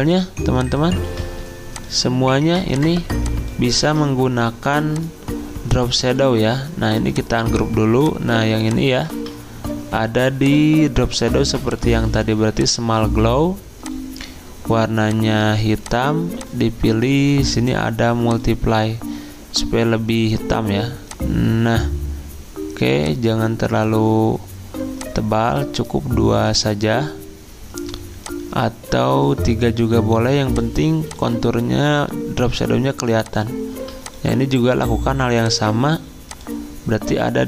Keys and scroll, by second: 1.1 ctrl+z, 3.8 ctrl+z, 9.1 ctrl+z.